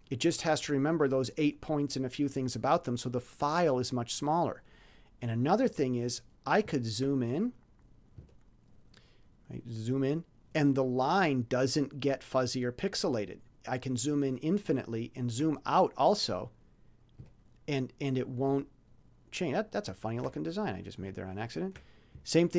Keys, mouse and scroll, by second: 7.2-7.7 ctrl+scroll up 3, 7.8-8.2 scroll down 2, 8.5-11.3 ctrl+scroll up 12, 11.7-12.0 ctrl+scroll up 2, 12.9-15.0 ctrl+scroll down 12, 17.3 ctrl+scroll down 2, 18.0-18.8 ctrl+scroll up 4, 19.2-19.5 ctrl+scroll up 2, 19.8 ctrl+scroll down 2.